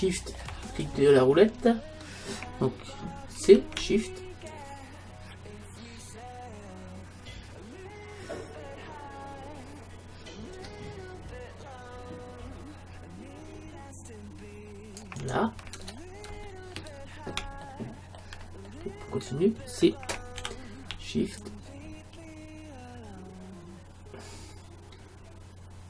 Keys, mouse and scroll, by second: 0.4-2.9 middle drag, 3.5 c, 15.9 middle click, 16.3 space, 17.6-20.4 middle drag, 20.4 c.